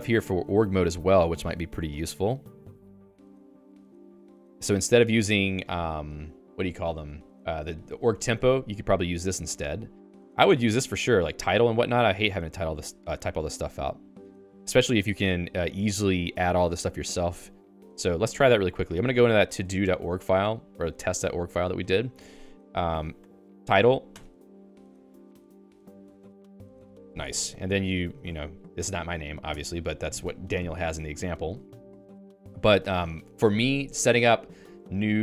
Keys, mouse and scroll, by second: 18.5 Escape, 19.4 ctrl+alt+j, 20.8 ctrl+j, 21.2 ctrl+j, 21.6 Return, 22.4-28.2 typing, 27.4 ctrl+s, 29.5 Escape, 29.9 j, 31.4 j, 32.0 k, 32.6 k, 32.8 k.